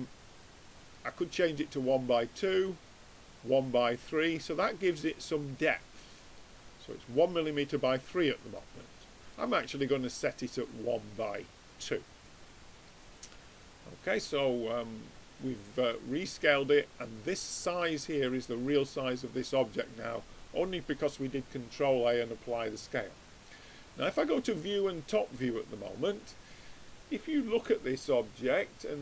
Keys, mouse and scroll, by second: 2.5-4.3 drag, 4.3-9.4 middle drag, 9.4-11.1 drag, 11.5-14.2 middle drag, 14.2-15.9 drag, 16.1-22.6 middle drag, 22.6-24.5 drag.